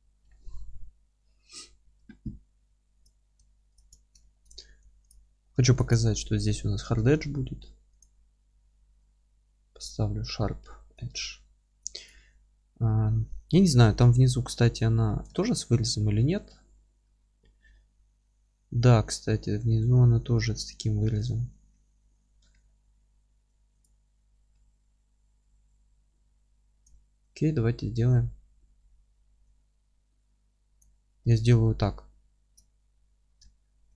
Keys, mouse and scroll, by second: 1.8 Tab, 1.8-3.0 middle drag, 2.3 scroll up 1, 2.5 2, 3.0 click, 3.9 scroll up 1, 4.2-5.0 alt+middle drag, 4.5 scroll up 1, 5.0 ctrl+click, 5.5 ctrl+z, 5.7 ctrl+click, 6.0-14.7 middle drag, 6.3 scroll down 2, 8.0 q, 8.5 Tab, 8.7 scroll down 2, 9.8 scroll down 2, 11.4 alt+q, 14.7-15.0 scroll down 2, 16.5 scroll down 2, 16.7 middle click, 17.5 scroll up 2, 17.7 middle click, 22.1-23.8 middle drag, 22.2 scroll down 1, 23.8 click, 24.1 alt+q, 24.5-30.8 alt+middle drag, 26.8 Tab, 29.8 3, 30.8 click, 31.2-33.9 alt+middle drag, 33.1 F3.